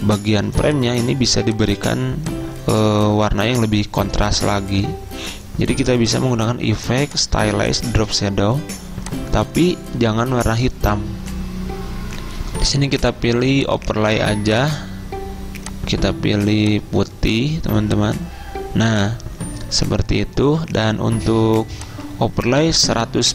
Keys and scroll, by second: 0.8 v, 1.3 ctrl+z, 4.7 ctrl+g, 22.7 typing.